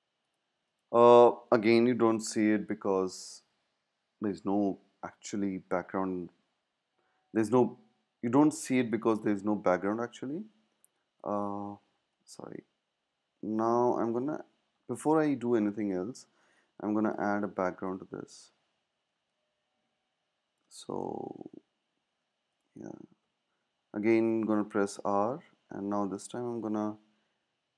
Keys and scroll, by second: 10.9 space, 16.4 space, 23.2 r.